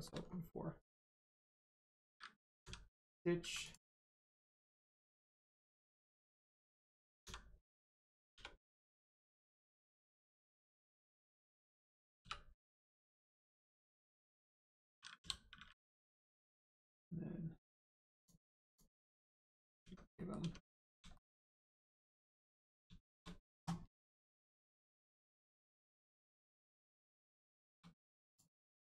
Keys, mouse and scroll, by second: 0.7 middle click, 0.8 click, 1.6 click, 1.6-2.6 scroll up 1, 2.6 v, 3.6 click, 5.9 click, 7.2 v, 8.8 click, 9.5-9.9 scroll down 1, 9.9 click, 10.3 middle click, 10.6-10.9 scroll up 1, 12.6 click, 16.5 right click, 18.1 click, 18.9-19.5 scroll down 1, 19.8 Tab, 20.1 middle click, 20.4 Tab, 20.7 scroll down 1, 21.1 shift+middle click, 22.4 click, 23.0 shift+middle click, 24.5-24.9 scroll up 1, 25.2 shift+middle click, 25.9 click, 26.3 scroll down 1, 26.9-27.3 scroll up 1, 27.5 shift+click, 28.3 click.